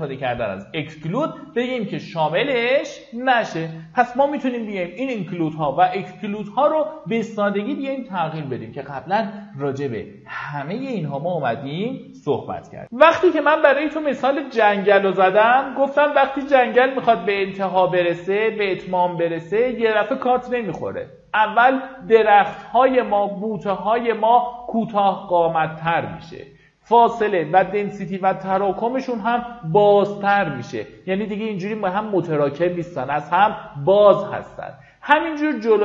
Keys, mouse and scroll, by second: 13.2 shift+q.